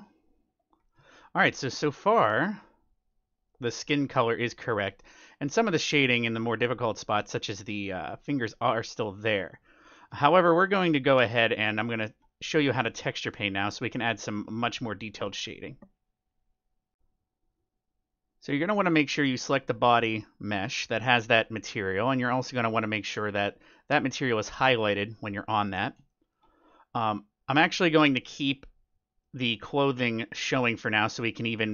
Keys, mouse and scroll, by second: 0.0-1.5 drag, 0.7-3.2 middle drag, 3.0-4.7 drag, 3.4-14.7 middle drag, 18.0-20.1 drag, 23.2-26.6 drag, 23.5-25.5 middle drag, 26.0-27.9 middle drag, 28.4-31.7 middle drag, 30.1 scroll down 1.